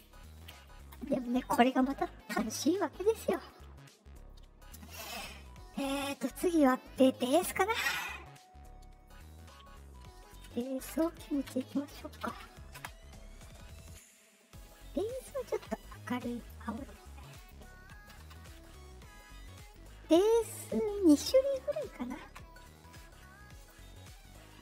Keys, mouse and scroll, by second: 4.9 click, 7.4 right click, 8.9 middle click, 9.5 middle click, 14.2 middle click, 15.1 click, 17.3 click, 19.6 middle click, 19.6 scroll up 2, 22.7 middle click, 22.7 scroll down 2, 23.5 click.